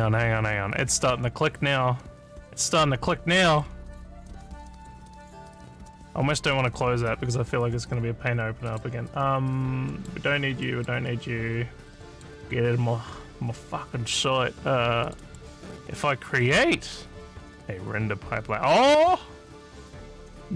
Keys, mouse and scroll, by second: 1.4-3.6 drag, 4.6 click, 6.4 click, 8.7 click, 9.9 middle click, 10.7 middle click, 12.1 click, 15.1 click, 15.3 right click.